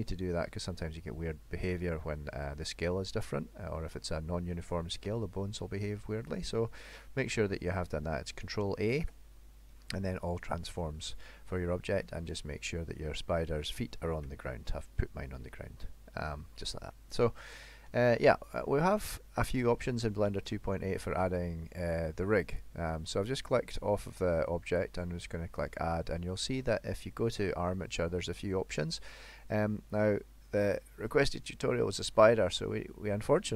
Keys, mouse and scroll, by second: 3.4 middle click, 6.3 middle click, 8.6 ctrl+a, 11.2 middle click, 12.0 middle click, 14.3 KP_1, 16.9 middle click, 17.7-18.1 scroll up 1, 18.1 shift+middle click, 22.6 click, 24.8 click.